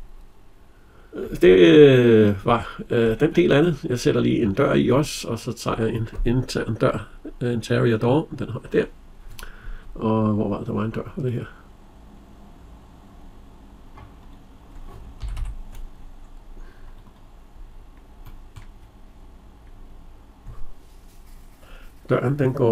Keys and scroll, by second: 14.9 Escape.